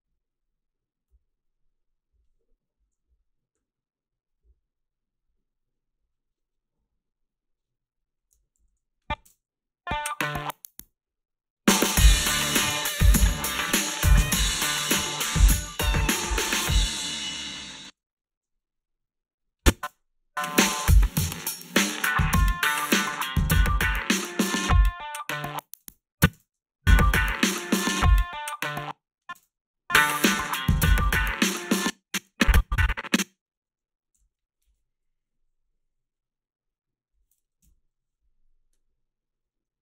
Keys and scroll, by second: 9.3 space, 17.6 space, 17.9 ctrl+s, 19.9 space, 25.8 space, 26.3 space, 28.7 space, 29.3 space, 31.6 space, 34.1 g, 37.6 Home.